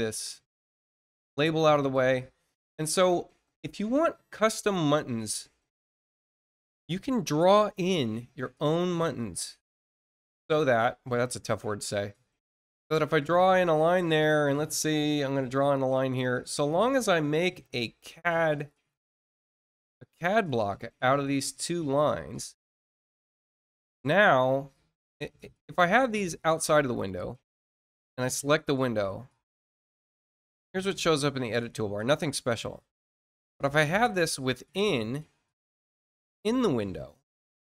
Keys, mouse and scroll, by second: 0.9 scroll down 1, 1.5 middle click, 2.0 middle click, 2.7-3.2 scroll up 2, 3.6 middle click, 5.0 scroll up 1, 9.5-11.8 drag, 13.6-15.7 drag, 16.4 click, 18.1 Caps_Lock, 18.1 click, 20.2 shift+click, 22.3 click, 26.2 ctrl+click, 28.0 click, 32.9 click, 36.0 click.